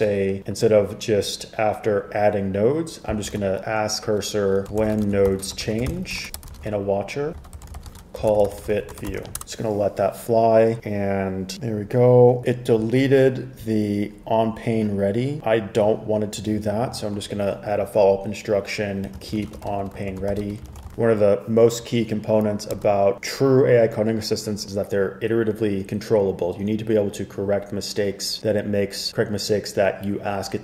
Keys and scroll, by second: 3.5 super+a, 4.5-9.9 typing, 19.0-21.4 typing, 22.9 typing.